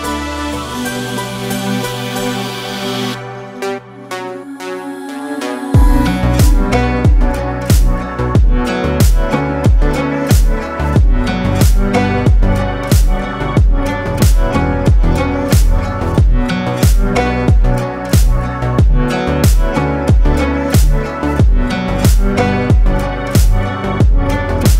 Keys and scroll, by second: 1.2 BackSpace, 1.5 Return, 17.4 ctrl+space, 18.4 ctrl+space, 19.1 ctrl+space.